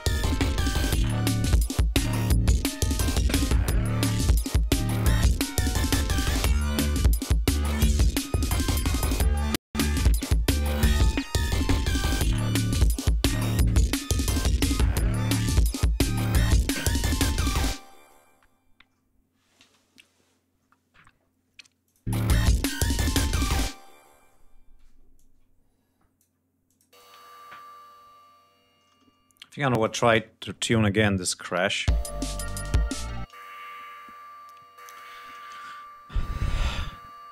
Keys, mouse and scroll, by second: 5.4 ctrl+scroll down 2, 5.7 ctrl+scroll up 2, 6.6 ctrl+scroll up 2, 7.3 ctrl+scroll down 2, 18.2 ctrl+scroll up 2, 19.3 space, 20.3-20.6 scroll down 2, 20.8-21.1 scroll up 2, 21.6 click, 21.9 space, 22.7-23.7 scroll down 5, 23.8 ctrl+space, 23.9 ctrl+scroll up 2, 24.9-26.1 ctrl+drag, 26.4-26.9 drag, 26.8 space, 26.9 ctrl+scroll up 2, 27.8 ctrl+scroll down 2, 28.3 ctrl+space, 29.5 click, 30.4 click, 31.6 l, 33.1 click, 34.5 click, 36.4-37.3 drag.